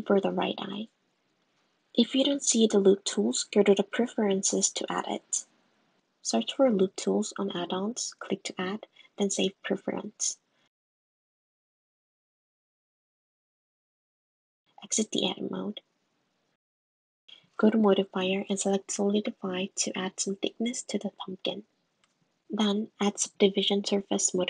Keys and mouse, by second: 3.8 middle click, 15.5 Tab, 16.4 middle click, 17.8 middle click, 18.3-19.6 middle drag, 20.4-22.1 middle drag.